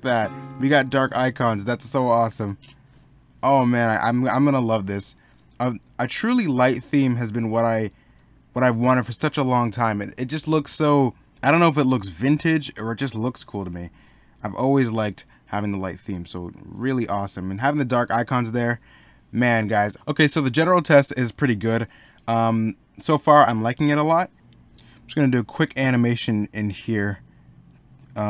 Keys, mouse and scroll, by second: 3.5 middle click, 12.5 middle click, 17.3 middle click, 20.1 middle click.